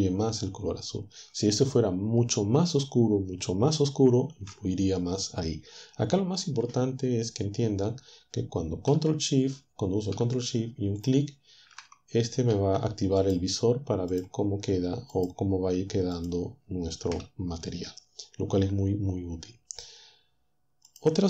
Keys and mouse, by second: 11.0 ctrl+shift+click, 13.2 ctrl+shift+click, 14.1 click, 15.1 click, 16.1 click.